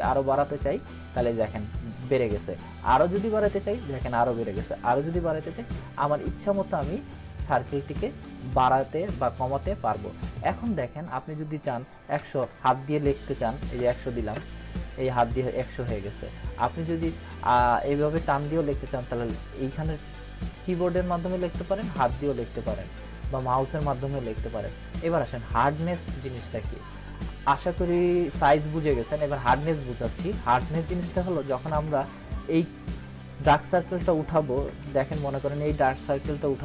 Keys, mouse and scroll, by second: 3.0-3.6 drag, 10.6-11.5 drag, 14.3 Return, 16.9-19.3 drag, 31.6 ctrl+=, 34.7-36.4 typing.